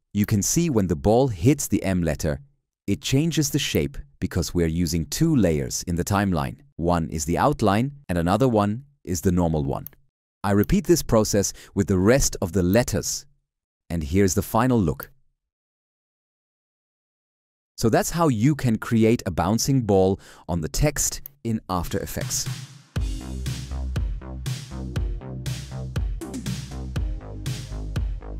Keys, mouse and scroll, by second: 17.5 shift+/.